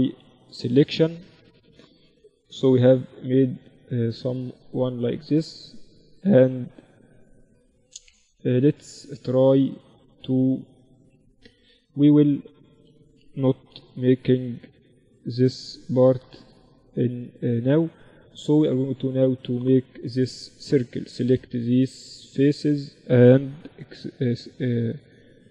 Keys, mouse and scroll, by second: 1.6 KP_1, 2.1 z, 6.0-10.5 middle drag, 10.5 Tab, 11.6-13.5 drag, 11.8 a, 12.0 a, 13.1 b, 14.8-16.7 drag, 17.0-19.7 middle drag, 19.0-21.1 drag, 19.5-23.1 right drag, 19.7 z, 21.8 z, 23.0 x, 25.0-25.5 right drag.